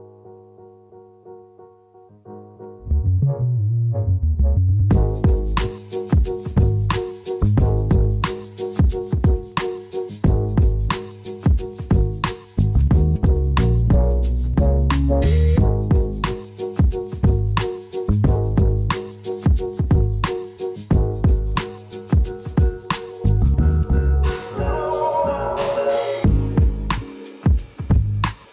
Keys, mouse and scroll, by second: 0.1-0.4 scroll up 2, 3.4 n, 4.0 click, 4.2 n, 7.6-12.0 shift+middle drag, 8.0-8.3 scroll down 2, 8.5 scroll down 2, 9.2 shift+c, 10.9 shift+a, 11.5 s, 12.0 click, 12.1 scroll down 2, 12.2 s, 12.7 click, 13.0-15.4 middle drag, 13.5 KP_0, 14.0 scroll down 2, 14.8 scroll down 2, 15.4 scroll down 1, 15.4-23.5 drag, 16.6 KP_0, 22.7 scroll down 1, 23.5-25.8 middle drag, 24.6 s, 25.8 click, 25.9 scroll down 1, 26.3-27.8 middle drag, 26.8 scroll down 1, 27.8-28.5 drag.